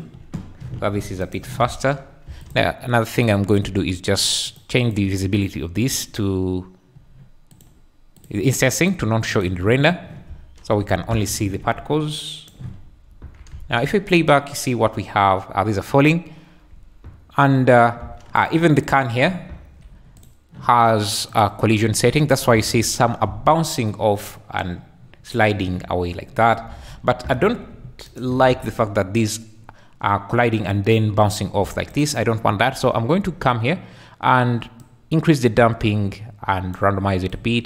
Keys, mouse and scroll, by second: 1.3 shift+click, 1.6 space, 2.3 space, 2.4 click, 3.1 click, 4.4 click, 4.8 click, 5.9 click, 7.6 click, 8.2 drag, 8.9 click, 10.3 space, 10.9 Escape, 12.2 shift+middle click, 13.0 `, 13.5 space, 16.9 `, 18.0 space, 18.8 click, 19.2 `, 19.4 click, 22.4 `, 23.3 space, 26.7 Escape, 27.0 `, 28.1 shift+click, 28.5 space, 31.6 space, 31.9 click, 34.9-36.8 drag, 37.4 click.